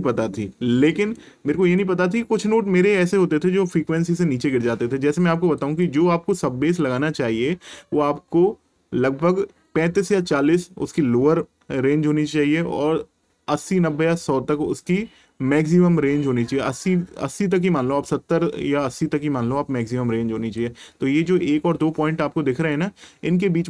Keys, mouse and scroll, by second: 1.0 right click, 1.6 click, 5.6 click, 12.5 click, 22.7 click.